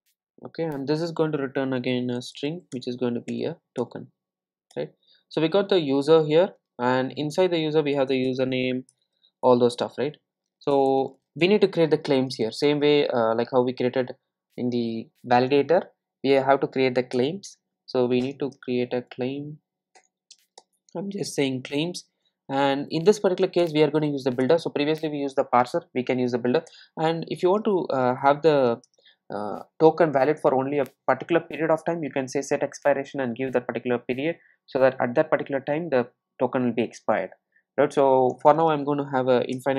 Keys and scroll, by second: 2.8 Return, 17.3 Return, 24.5 Return.